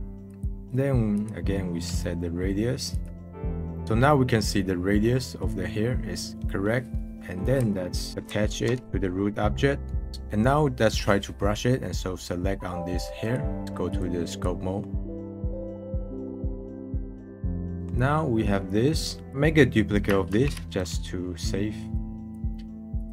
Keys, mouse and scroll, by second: 0.7-3.8 drag, 3.8-5.2 scroll up 1, 5.2 middle click, 5.9 scroll down 1, 6.1 middle drag, 8.1 ctrl+click, 10.1-13.2 middle drag, 13.2-13.6 drag, 13.6 middle click, 13.8-14.6 drag, 14.6 middle click, 14.9 drag, 15.1-15.6 middle drag, 15.6 click, 15.7 middle click, 16.2 middle click, 16.3 scroll up 1, 16.4 middle click, 16.5 click, 16.9 scroll down 1, 17.1 click, 17.2 middle click, 17.5 scroll down 1, 17.7-20.3 drag, 21.9-23.1 drag.